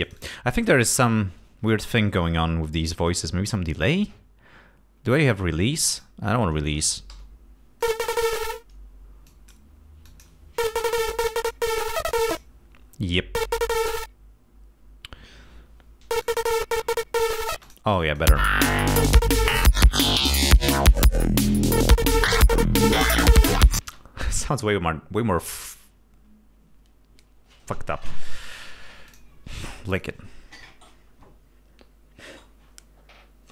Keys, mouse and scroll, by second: 0.0 space, 0.2 click, 5.5 click, 7.2 l, 7.9 click, 9.4 click, 10.2 click, 11.4 click, 12.2 click, 16.3 click, 17.7 space, 17.8 click, 18.1 click, 18.4 space, 24.0 space, 25.8 right click, 29.2 click, 30.0 click.